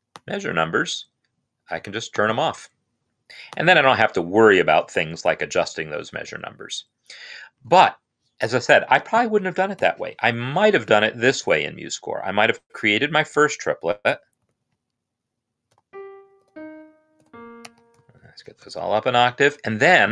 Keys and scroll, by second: 9.6 n, 12.3-13.8 typing, 14.1 ctrl+3, 15.4-17.0 typing, 17.4 Escape, 17.8 shift+Left, 18.0 shift+Left.